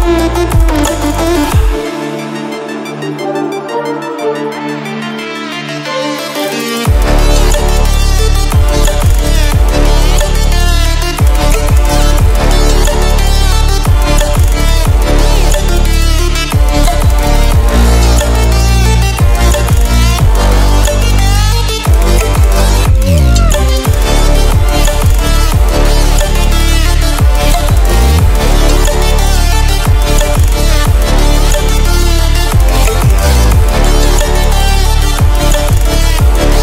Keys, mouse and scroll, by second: 3.4 click, 7.1 ctrl+w, 15.1 ctrl+w, 17.1-18.6 alt+shift+drag, 23.6 w, 27.1 ctrl+w, 28.7-30.4 ctrl+alt+scroll up 2, 30.8 click, 31.6 ctrl+w, 34.5 ctrl+w, 36.0-36.6 drag.